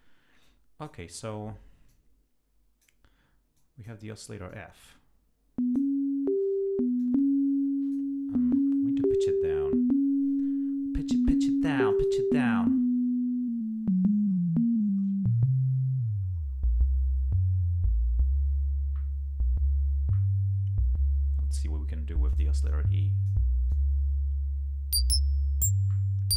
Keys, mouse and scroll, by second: 0.4 click, 1.9-3.0 drag, 3.6 click, 4.5-5.9 drag, 7.0-8.1 drag, 11.9 click, 12.4-13.0 scroll down 4, 13.5-15.4 scroll down 10, 16.0-16.7 scroll down 2, 17.6 scroll down 2, 18.0-18.5 scroll up 4, 22.3 click, 22.7 click, 23.7-26.3 drag.